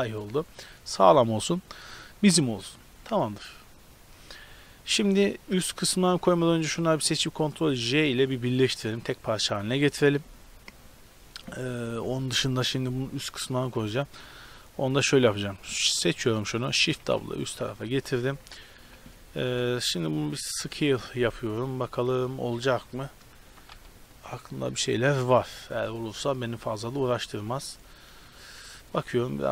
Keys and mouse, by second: 3.1-5.1 middle drag, 6.4 b, 8.0 ctrl+j, 13.6 right click, 13.8 Tab, 15.5 middle click, 16.3 right click, 16.9 shift+d, 18.4 KP_7, 18.9 z, 19.5 s, 23.5 g, 25.3 z, 25.5 click, 25.7 click, 25.7 middle click, 26.2 click, 26.3 middle click, 26.7 middle click, 27.3 middle click, 27.6 middle click, 28.2 middle click.